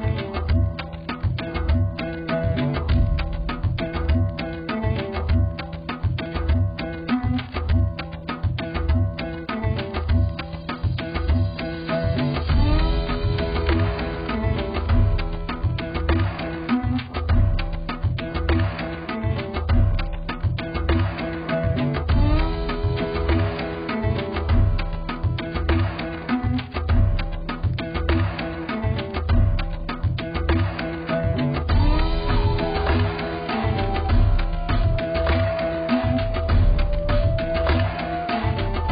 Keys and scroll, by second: 9.4 z, 13.6 ctrl+t, 26.1 z.